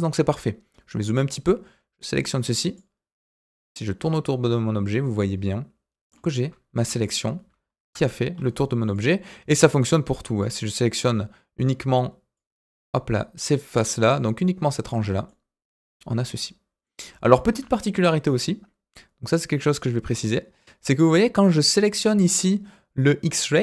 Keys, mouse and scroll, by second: 0.0-0.8 scroll up 2, 0.8-1.4 scroll up 1, 1.4-2.7 drag, 3.4-3.7 scroll down 2, 3.7-6.1 middle drag, 6.7 KP_4, 8.3-8.8 scroll up 2, 8.8 click, 9.8 click, 12.3-14.1 drag, 14.9-15.2 scroll down 2, 15.2-16.8 middle drag, 17.5 KP_1, 18.2-19.2 scroll up 2, 19.2 click, 19.7 click.